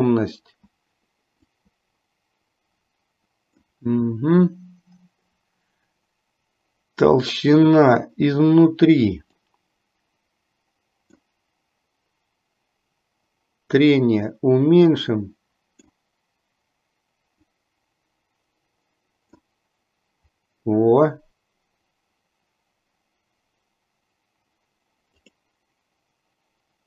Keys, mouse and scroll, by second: 1.7-3.9 drag, 9.7-11.5 drag, 14.0-16.0 drag, 17.8-19.5 drag, 25.5 click.